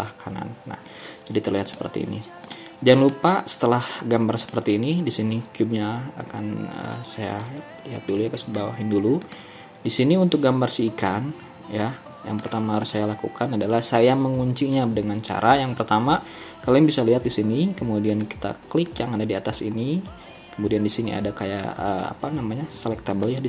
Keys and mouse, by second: 1.7-2.9 drag, 12.1-23.4 drag.